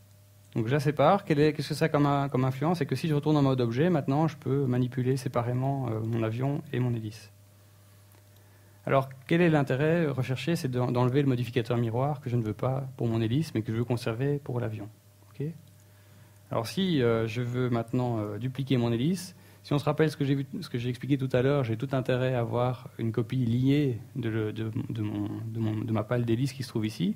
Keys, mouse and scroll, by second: 1.2 g, 2.1 right click, 2.4 g, 2.9 right click, 3.2 right click, 3.3 g, 3.7 right click, 3.9 g, 4.3 right click, 4.7-5.1 scroll up 3, 5.1 s, 5.6 right click, 6.4-6.7 scroll down 2, 9.0 click, 10.9 right click, 12.7 right click, 13.2-13.5 scroll up 2, 13.5 shift+middle click, 13.8-14.1 scroll up 2, 14.9 KP_1, 16.0 shift+middle click, 16.6 scroll down 2.